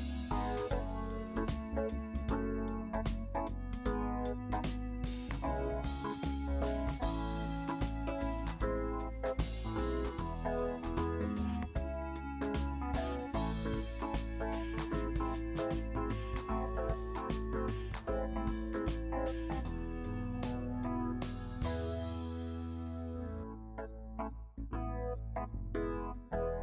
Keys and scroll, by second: 5.6 ctrl+j, 23.6 ctrl+j.